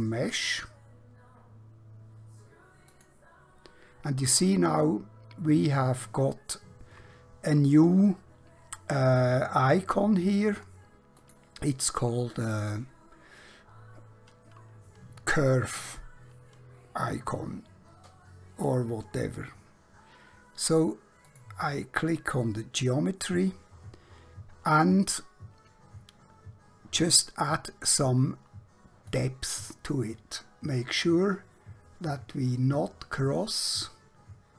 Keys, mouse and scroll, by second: 2.9 click, 11.2 click, 18.0-20.5 scroll down 1, 21.3 click, 22.2-26.1 scroll down 1, 29.1 click.